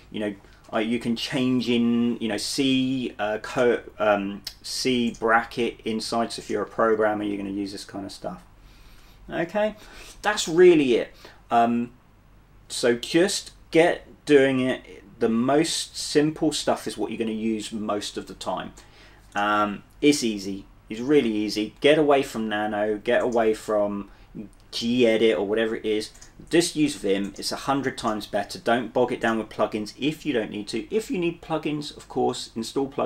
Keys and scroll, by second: 1.7 d, 7.2-9.7 typing.